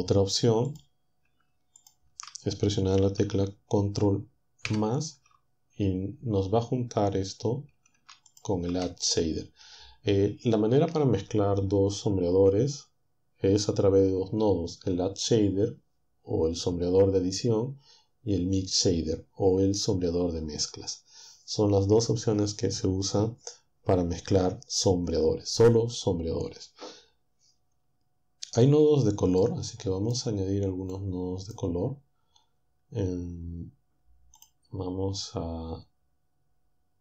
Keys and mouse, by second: 4.7 ctrl++, 8.4 ctrl+shift+click, 29.4 click, 30.9-34.6 drag.